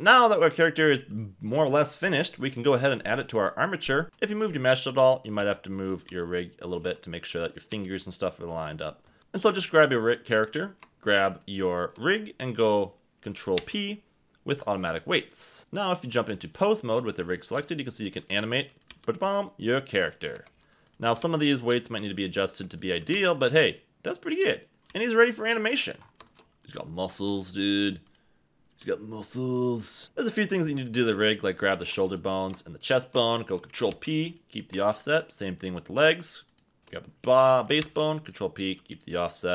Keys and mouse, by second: 2.2 click, 4.0 Escape, 4.0 b, 4.0 g, 5.4-8.1 typing, 5.9 click, 6.6 click, 7.5 click, 8.7 click, 9.2 Tab, 9.2 KP_1, 11.2 shift+click, 13.6 ctrl+p, 15.4 click, 15.8 click, 17.2 click, 17.5 r, 18.3 Escape, 18.9 r, 20.3 Escape, 21.0 r, 21.2 r, 22.5 Escape, 22.8 click, 23.0 r, 23.1 r, 24.9 r, 25.7 Escape, 26.2 shift+middle click, 26.6 r, 28.7 r, 29.6 click, 30.0 Escape, 33.9 ctrl+p, 37.8 ctrl+p.